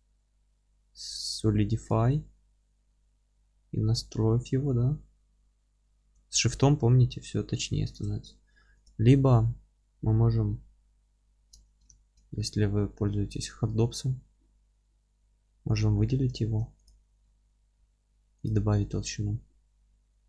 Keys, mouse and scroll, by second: 1.8-11.3 drag, 11.3-15.7 middle drag, 11.9 ctrl+space, 13.1 q, 15.7 click, 16.0-16.8 middle drag, 16.8 click, 17.4 q.